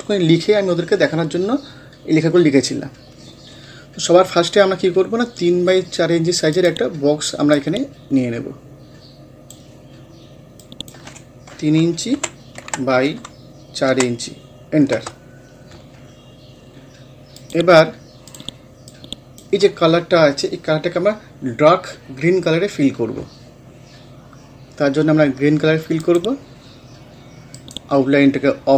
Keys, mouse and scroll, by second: 3.8 scroll down 1, 6.5 click, 6.6-10.6 drag, 12.2 3, 12.6 Tab, 13.9 4, 14.9 Return, 17.4-21.8 drag, 26.0 click, 27.6 right click.